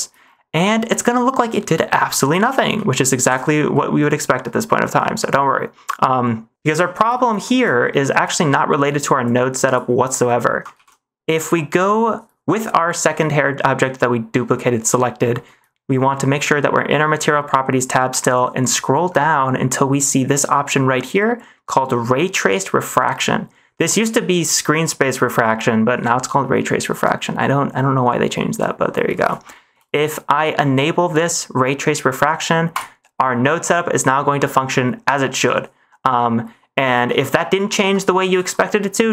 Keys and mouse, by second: 2.6 middle click, 3.2 ctrl+s, 3.7 middle click, 4.6 middle click, 5.4 middle click, 7.7 shift+middle click, 9.1 click, 10.3 middle click, 10.7 ctrl+s, 12.8 drag, 29.4 shift+middle click, 32.7 click, 37.1 shift+middle click, 38.2 ctrl+s.